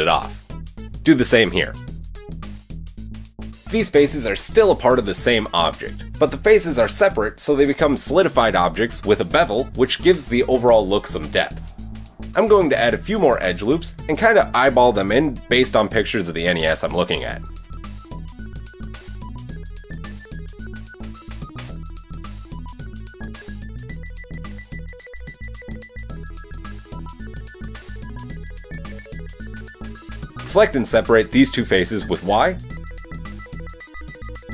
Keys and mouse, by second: 1.0 click, 3.5 y, 3.6 Escape, 3.6-5.2 middle drag, 4.0 Tab, 5.2 click, 5.3-8.2 middle drag, 10.6 middle click, 10.8 KP_1, 11.3 click, 11.4 Tab, 11.4-12.6 shift+middle drag, 13.4 Tab, 18.2 Tab, 19.6 g, 23.5 ctrl+r, 26.0 click, 26.1-28.2 ctrl+middle drag, 26.2 ctrl+r, 28.5-30.2 middle drag, 30.2-34.5 drag, 30.5 middle click, 30.5 right click, 31.0 shift+middle click, 31.0 shift+right click, 31.9 y, 32.3 Escape.